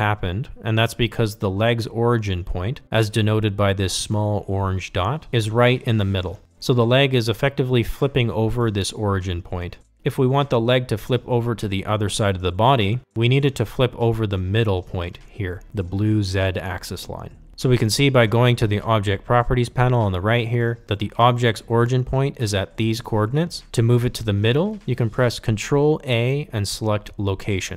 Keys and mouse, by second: 0.0-3.1 drag.